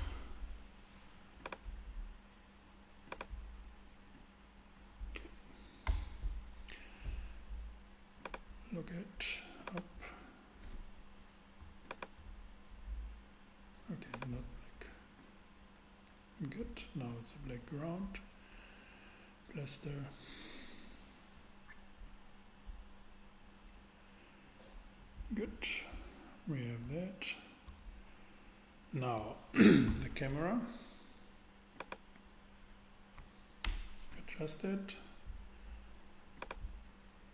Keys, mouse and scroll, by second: 5.8 Return, 21.9 click, 29.9 shift+a, 33.6 ctrl+alt+KP_0, 34.7 ctrl+alt+KP_0.